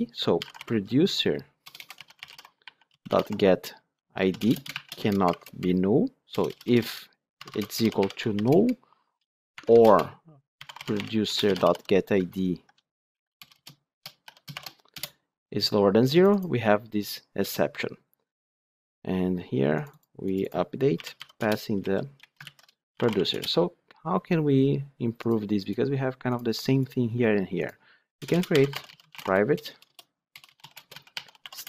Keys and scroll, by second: 4.3 Return, 11.2 Return, 12.1 ctrl+shift+Right, 14.9 Return, 21.3 Return, 22.3 ctrl+shift+Left, 23.2 Return.